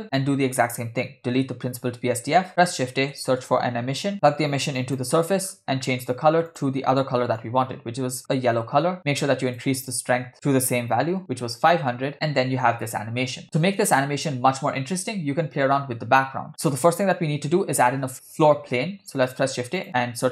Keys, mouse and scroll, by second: 0.0 middle click, 0.0 scroll down 2, 0.7 click, 1.2 z, 1.9 x, 2.4 shift+a, 4.4-5.1 drag, 5.4-6.5 scroll up 3, 5.9 middle click, 6.5 click, 9.0 click, 10.3 click, 11.0 0, 12.1 space, 16.5 space, 18.9 shift+a.